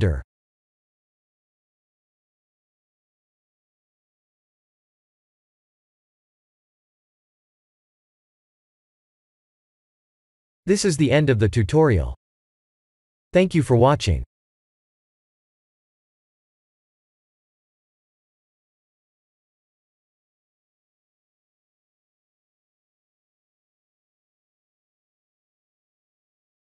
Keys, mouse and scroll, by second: 2.8 click, 4.2 click, 7.5 ctrl+s.